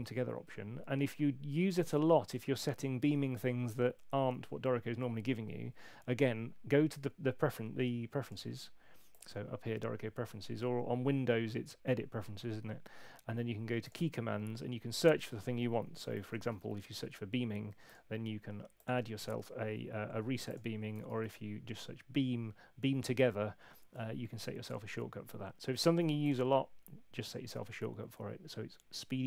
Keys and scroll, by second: 15.7-16.9 typing, 20.9 BackSpace.